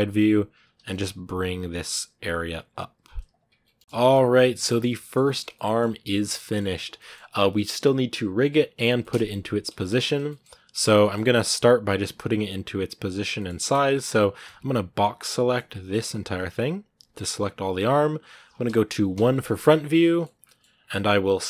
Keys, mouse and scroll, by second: 0.4 g, 3.5 scroll down 1, 3.7 z, 3.8 shift+middle click, 4.1 scroll down 1, 4.2-8.4 middle drag, 8.4-8.8 scroll up 1, 8.8-10.7 middle drag, 10.7 scroll down 1, 10.8-16.4 middle drag, 16.4 b, 19.0 KP_1, 19.8 shift+middle click, 20.4 shift+scroll up 2, 21.0 scroll down 2, 21.2 shift+middle click.